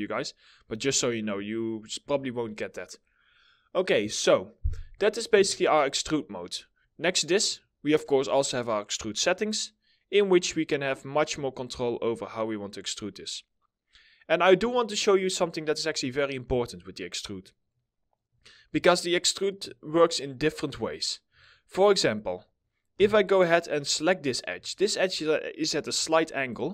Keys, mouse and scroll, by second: 0.3 alt+middle click, 1.1 alt+middle click, 4.1 middle click, 16.0 scroll up 1, 16.3-16.9 scroll down 1, 16.9 middle click, 18.4 alt+middle click, 20.5 scroll up 1, 21.0 alt+middle click, 22.4 4, 23.9 scroll, 23.9 scroll up 1, 24.2 alt+middle click, 25.0 middle click, 25.6 alt+middle click.